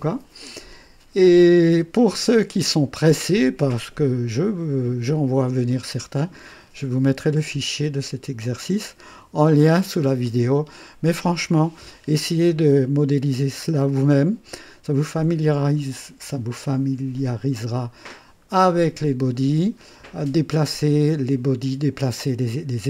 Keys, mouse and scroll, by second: 3.1-5.8 drag, 15.8-16.1 scroll up 2, 17.5-17.9 scroll up 2.